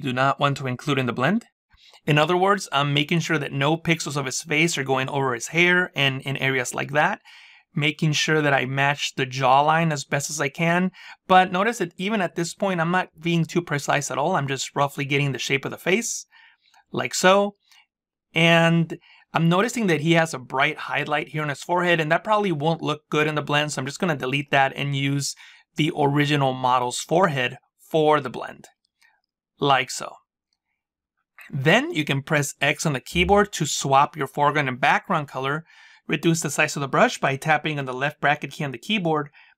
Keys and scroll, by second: 32.4 x, 37.9 [.